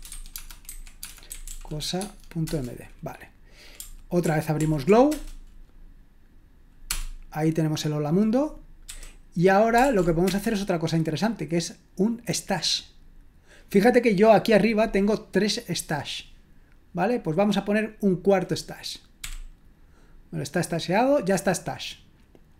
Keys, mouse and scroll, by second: 0.0-3.3 typing, 2.4 Return, 4.2 ctrl+p, 4.6 ctrl+p, 5.1 Return, 6.8 Return, 8.9 q, 9.8 ctrl+p, 10.2 Return, 19.2 s.